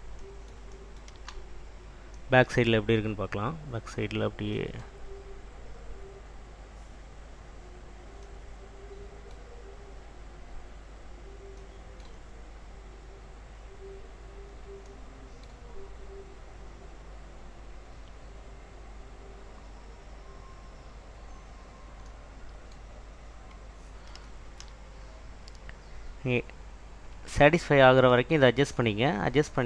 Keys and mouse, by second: 5.5 click, 12.3 click, 13.1 click, 15.9 click, 16.8 click, 18.9 click, 21.8 click, 27.2 Tab, 29.1 click.